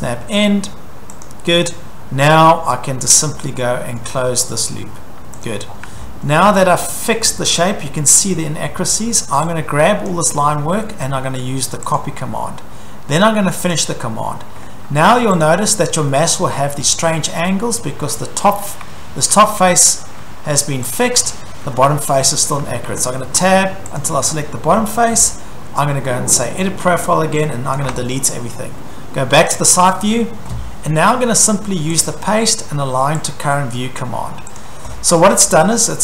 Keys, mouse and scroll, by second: 1.2 click, 2.7-3.5 scroll, 4.0-4.6 scroll, 5.5 click, 5.7-6.5 scroll, 5.9 Escape, 6.1 Escape, 6.5 middle click, 7.2-8.2 scroll, 8.5-10.1 scroll, 10.1 click, 10.1 scroll, 12.0 click, 13.7 click, 15.4 click, 17.0 shift+middle click, 18.1 shift+middle click, 21.0 click, 21.7 Escape, 22.5 Tab, 22.9 Tab, 23.4 Tab, 24.0 click, 24.1 Tab, 26.4 click, 27.7 click, 27.9 Delete, 29.6 click, 29.7 click, 32.0 click, 33.2 click, 34.6 click, 34.9-36.0 scroll.